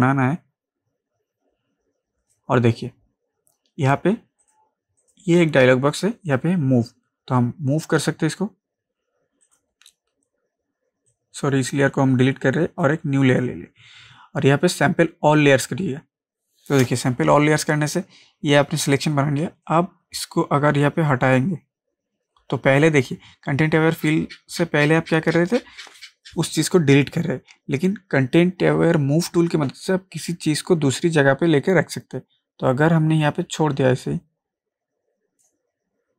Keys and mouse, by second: 9.4 click, 11.4-13.3 drag, 19.7-29.7 drag.